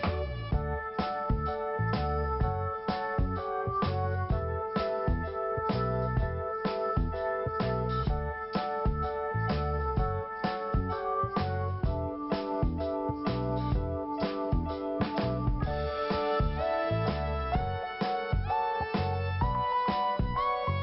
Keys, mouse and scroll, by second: 0.1 click, 0.2 click, 7.3 click, 8.3 click, 9.3 scroll down 1, 15.9 scroll up 1, 17.4 scroll down 1, 18.3 click, 18.5 click, 18.7 click, 18.8 click, 19.6-20.0 scroll up 1.